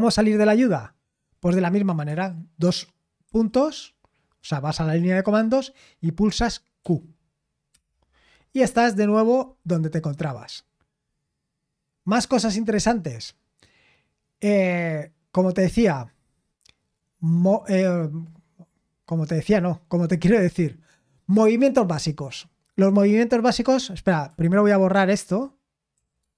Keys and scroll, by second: 6.8 typing, 7.7 Return, 20.3-21.7 scroll up 1, 25.7-26.3 typing.